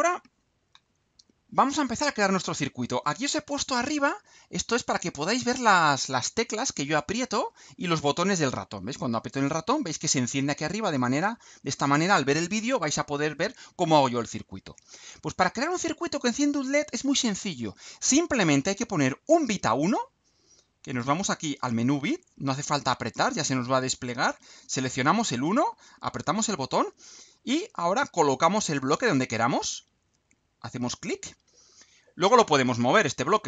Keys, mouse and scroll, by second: 9.0 click, 9.7 click, 26.0 click, 30.3 click.